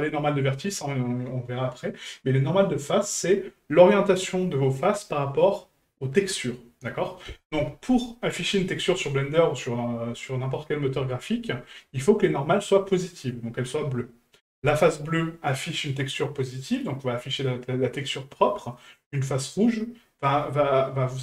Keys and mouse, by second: 8.1 middle drag, 9.1-9.4 middle drag.